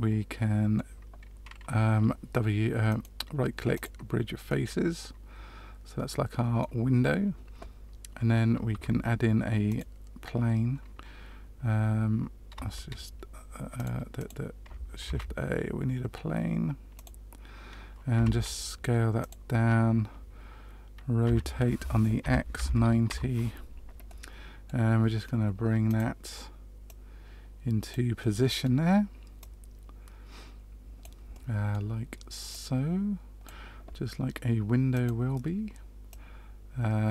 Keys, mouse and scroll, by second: 2.8 right click, 4.4 middle click, 8.7 Tab, 9.6 click, 12.5 space, 14.1 click, 15.0 shift+a, 18.1 s, 21.2 r, 24.0 middle click, 25.8 click, 26.8 click, 28.1 middle click, 29.3 click, 32.4 middle click, 32.6 click, 34.9 click, 36.0 click.